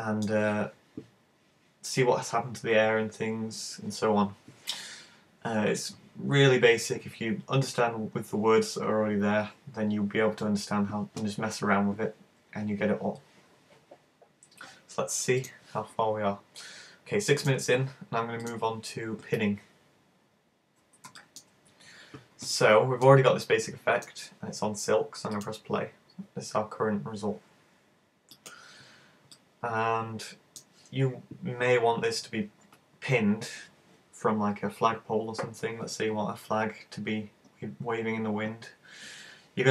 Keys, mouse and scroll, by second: 8.0-9.1 scroll up 11, 18.5 click, 20.0-20.4 scroll up 3, 20.4 scroll down 1, 20.4-21.2 scroll down 3, 21.2 shift+middle click, 22.6 middle click, 23.7 middle click, 25.4 click, 28.4 click, 29.4 click.